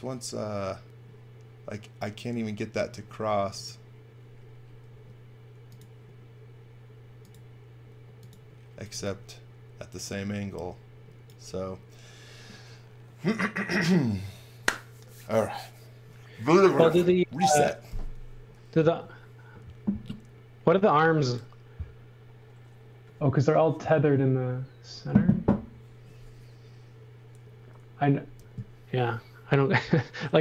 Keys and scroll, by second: 2.8 space, 4.9 r, 8.4-9.4 typing.